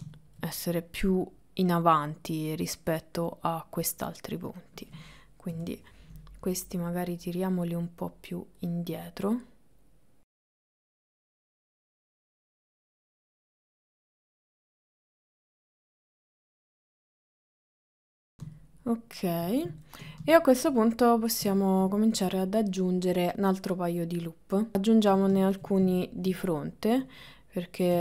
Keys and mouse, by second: 1.2 middle click, 2.0 middle click, 4.4 middle click, 5.6 KP_7, 6.8 click, 7.6 click, 9.4 click, 10.6 click, 11.0 middle click, 11.5 middle click, 12.3 middle click, 12.4 KP_3, 12.8 shift+middle click, 13.1 click, 13.8 click, 14.4 ctrl+middle click, 14.6 click, 15.2 click, 15.8 click, 16.2 click, 16.8 click, 17.4 click, 17.7 click, 17.9 click, 18.1 shift+middle click, 18.3 ctrl+middle click, 18.6-19.7 shift+middle drag, 20.0 ctrl+middle click, 20.3 shift+middle click, 26.1 ctrl+middle click.